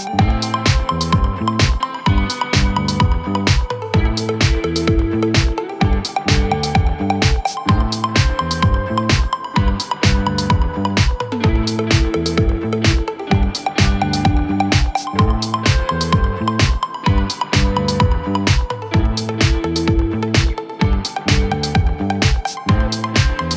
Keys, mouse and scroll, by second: 0.0 click, 0.7 middle click, 4.2 click, 5.0-7.8 middle drag, 7.7 scroll up 2, 8.4 middle click, 9.6-10.9 middle drag, 10.9-17.4 drag, 17.4-18.8 middle drag, 18.8-20.1 scroll down 2, 20.1 middle click, 23.0 middle click.